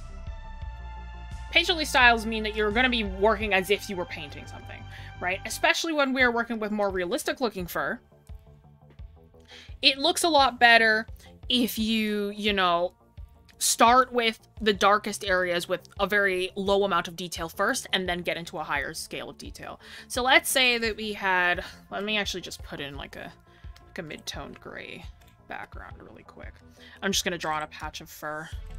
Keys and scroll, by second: 1.7 ctrl+s, 21.2 ctrl+z.